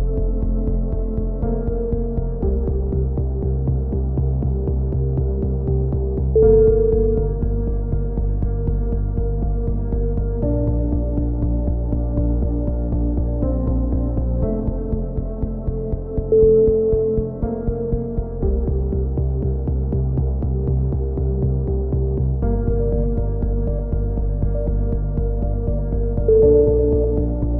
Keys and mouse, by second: 0.5 a, 0.9-2.6 middle drag, 1.7 z, 2.6 click, 3.5 middle click, 4.1 click, 5.5 ctrl+z, 8.8 shift+d, 10.2 click, 12.9 z, 13.2-14.5 drag, 15.1 click, 15.2-17.8 middle drag, 17.8 click, 21.3 r, 22.5 a, 23.0 z, 23.3 click, 25.2 ctrl+z, 25.9 right click, 26.6 click, 26.6 shift+q, 26.8 a, 27.4 click.